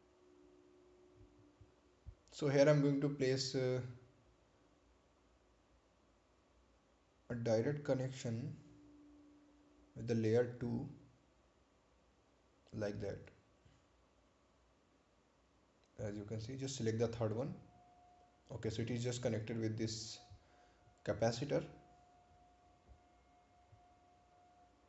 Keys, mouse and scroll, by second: 5.1 click, 14.2 click, 17.2 right click, 18.5 ctrl+click.